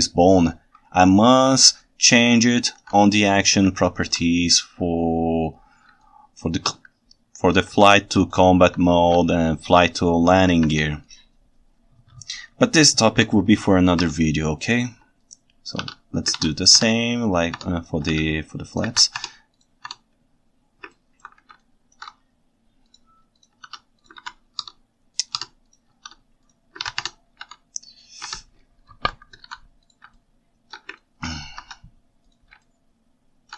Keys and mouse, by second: 2.0 ctrl+shift+right click, 3.8 ctrl+alt+right click, 6.1 ctrl+shift+right click, 6.3 ctrl+shift+middle click, 6.5 ctrl+shift+middle click, 6.6 ctrl+shift+right click, 6.7 ctrl+shift+middle click, 6.8 ctrl+shift+right click, 8.3 ctrl+alt+right click, 8.5 ctrl+alt+middle click, 8.8 right click, 9.3 ctrl+shift+middle click, 9.3 ctrl+shift+right click, 9.5 ctrl+shift+middle click, 13.1 shift+h, 14.0 Tab, 15.8 shift+s, 16.4 alt+a, 16.8 Tab, 18.1 shift+s, 18.9 alt+a, 19.3 Tab, 21.0 ctrl+alt+right click, 21.6 ctrl+shift+right click, 24.2 alt+a, 24.6 Tab, 26.0 shift+s, 26.8 alt+a, 27.1 Tab, 28.4 ctrl+Tab, 29.0 alt+h, 29.5 alt+a, 30.2-30.7 ctrl+shift+middle drag, 31.0 ctrl+alt+click, 31.1 ctrl+alt+right drag, 31.6 ctrl+Tab, 32.7 ctrl+shift+middle click, 32.7 ctrl+shift+right click, 32.9-33.5 ctrl+shift+middle drag.